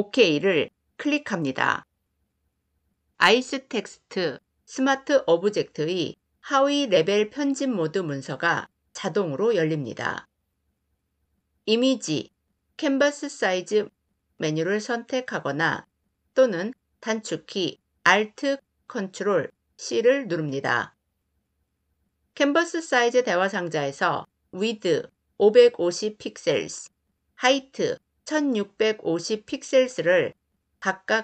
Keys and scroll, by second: 11.5 ctrl+alt+c.